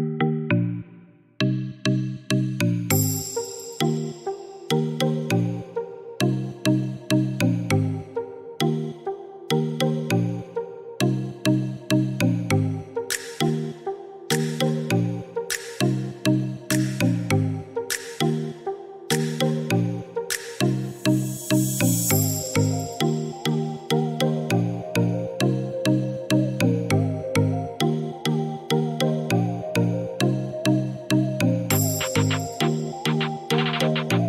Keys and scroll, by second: 17.8 Escape, 30.5 4, 31.0 0, 31.4 Return, 33.3 Escape.